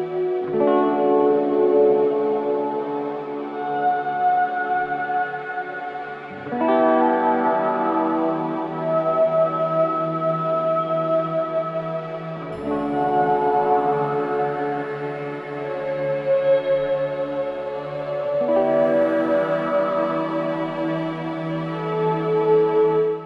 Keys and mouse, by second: 0.2 shift+click, 0.7 shift+click, 1.4-3.8 typing, 1.9 click, 3.2 click, 3.5 click, 4.8 shift+middle click, 5.6 click, 5.8 middle drag, 6.0 shift+middle click, 6.3 shift+middle click, 6.5 middle click, 6.7 shift+b, 7.0 shift+d, 7.7 w, 8.4 g, 9.0 click, 9.2 shift+click, 9.8-11.8 typing, 11.1 shift+click, 12.1 shift+click, 13.0-13.5 shift+middle drag, 13.5 shift+d, 13.9 w, 14.3 g, 14.7 shift+middle click, 15.7 KP_0, 16.0 KP_0, 16.4 shift+click, 17.1 shift+click, 17.5-19.1 typing, 18.2 shift+click, 18.9 shift+click, 19.4 shift+click, 19.7 shift+click.